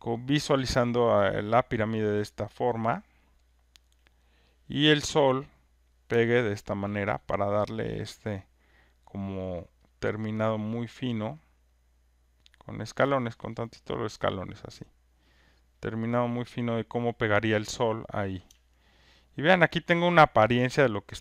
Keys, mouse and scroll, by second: 0.1 click, 2.6 alt+click, 3.8 click, 5.9 click, 7.1 alt+right click, 8.2 alt+click, 9.5 alt+right click, 11.0 alt+click, 12.8 alt+click, 15.2 click, 17.0 click, 18.0 click, 20.1 alt+right click, 20.4 alt+middle click, 20.6 alt+right click, 20.7 alt+middle click.